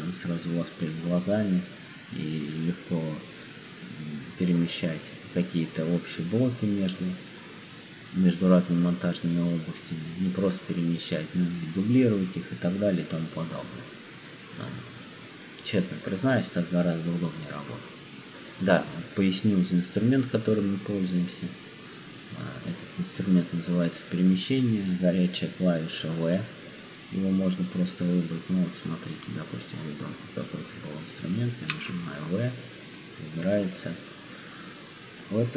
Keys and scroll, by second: 31.7 v.